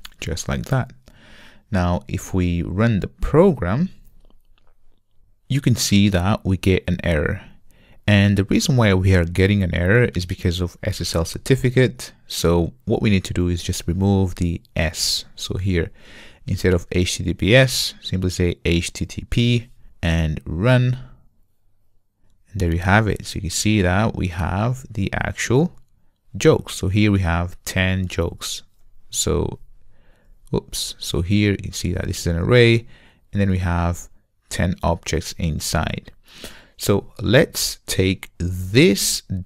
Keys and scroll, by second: 21.0 ctrl+r.